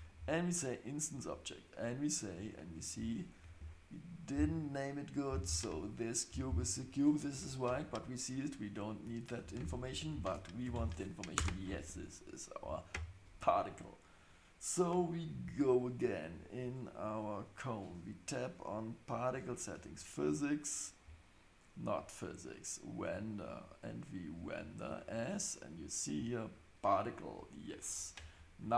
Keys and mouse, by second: 3.0 click, 3.6 click, 6.5-12.0 drag, 15.2 click, 24.9-26.6 drag.